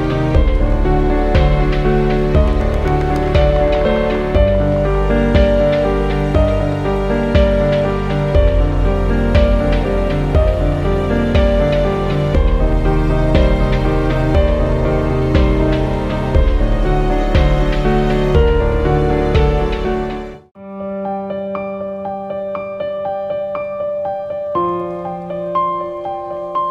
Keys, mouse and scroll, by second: 0.3 ctrl+g, 1.6 ctrl+j, 2.1 right click, 3.8 click, 6.1 scroll up 1, 8.8 click, 11.3 scroll down 1, 15.0 ctrl+d, 15.5 scroll down 1, 16.4 click, 19.1 i, 22.9 ctrl+d, 23.7 scroll up 1, 25.0 scroll down 1.